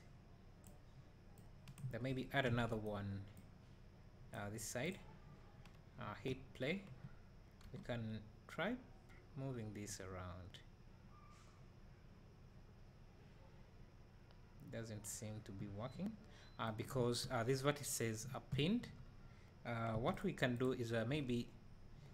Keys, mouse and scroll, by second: 0.0-2.9 drag, 3.4-5.0 drag, 6.0 space, 20.6 click, 21.1 Tab.